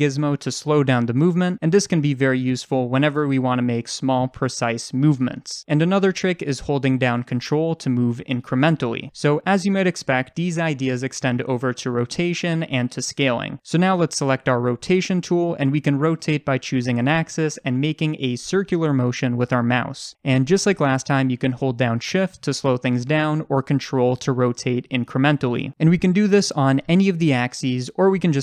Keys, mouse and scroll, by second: 10.0 ctrl+z, 25.5 ctrl+z.